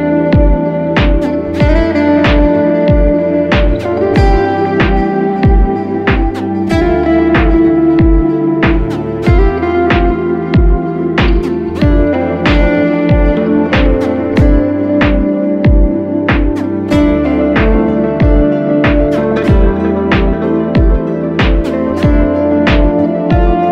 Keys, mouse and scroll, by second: 0.0 ctrl+z, 0.7 shift+click, 2.1 ctrl+click, 21.8-22.5 typing.